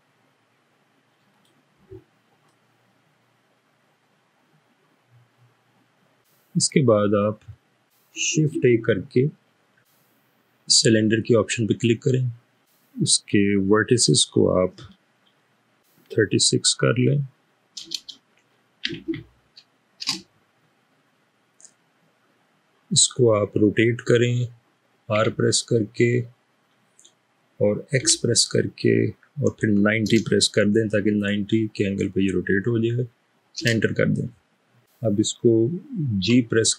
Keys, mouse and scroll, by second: 2.8-6.1 middle drag, 6.3-7.9 middle drag, 8.7 a, 11.1 click, 13.9 click, 16.1-16.7 typing, 17.8 typing, 18.8 typing, 20.1 Return, 22.5 typing, 25.2-25.9 typing, 28.0 typing, 29.6-30.1 typing, 33.5 typing, 36.5 typing.